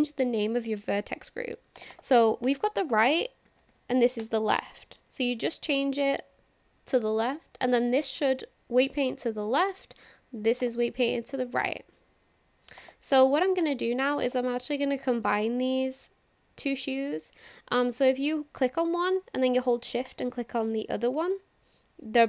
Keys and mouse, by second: 1.8-5.1 drag, 10.6 click, 12.8 click, 13.6 click, 14.2 click, 20.1 shift+click.